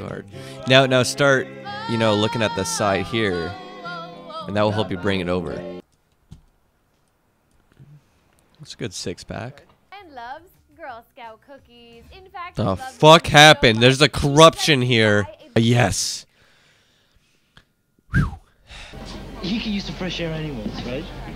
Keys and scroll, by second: 0.3 super+v, 5.6 super+v, 18.9 super+v.